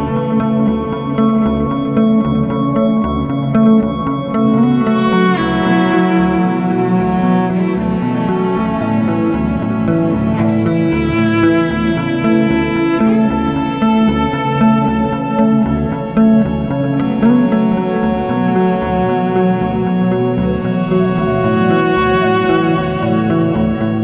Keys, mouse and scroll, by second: 0.0-0.8 scroll down 2, 0.8-1.9 middle drag, 1.9-4.2 scroll down 2, 5.0 s, 9.2-9.6 scroll up 2, 9.9-10.7 scroll up 2, 10.7 drag, 11.4 click, 13.2 KP_1, 14.6 g, 17.9 click, 18.7 shift+a, 21.4 scroll down 1, 21.6-23.1 middle drag, 23.1-24.0 drag.